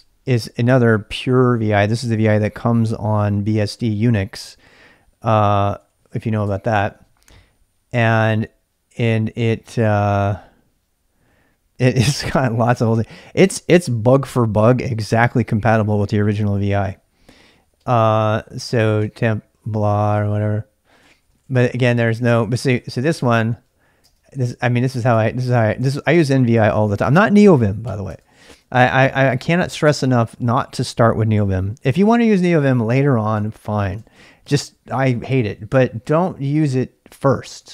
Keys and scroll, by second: 0.0-0.3 typing, 6.5 typing, 6.5 Return, 11.1-11.8 typing, 16.1-23.0 typing, 23.1 Down, 23.2 Down, 24.1-24.9 typing, 25.0 Return, 25.2 Return, 25.6 ctrl+o, 25.9 ctrl+[, 26.3-29.8 typing, 26.6 Return, 26.8 Return, 30.2 Down, 30.4 Up, 30.5 Up, 30.7 Up, 31.3 Up, 31.5-34.0 typing, 32.4 Down, 32.6 Down, 34.0 Up, 34.2 Up, 34.5 Up, 35.6-37.7 typing.